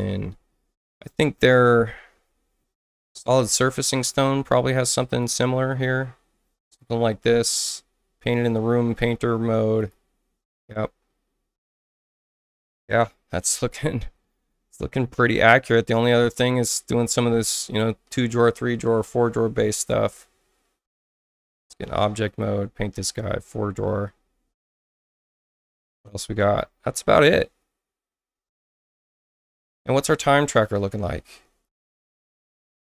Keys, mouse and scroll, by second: 2.7 click, 4.7 click, 5.2 click, 6.6 click, 9.8 click, 20.1 click, 21.7 click, 22.3 click, 30.0 click, 31.6 click.